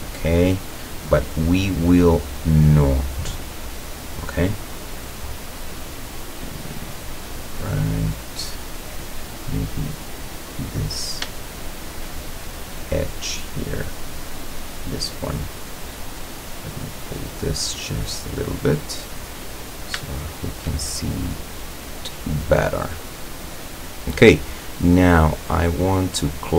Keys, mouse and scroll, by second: 0.3 scroll up 1, 1.2 right click, 2.0-3.8 drag, 4.3-9.2 middle drag, 9.3-9.7 scroll up 1, 10.9 right click, 11.6 shift+right click, 13.6 click, 14.6 right click, 15.6-17.8 drag, 17.9 scroll down 1, 19.4-19.8 scroll up 1, 20.1-22.9 shift+middle drag, 23.9 click, 25.6 click.